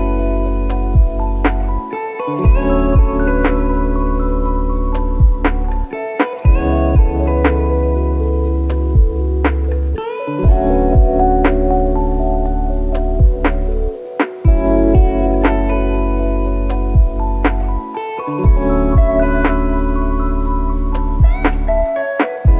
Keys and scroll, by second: 0.6 F1.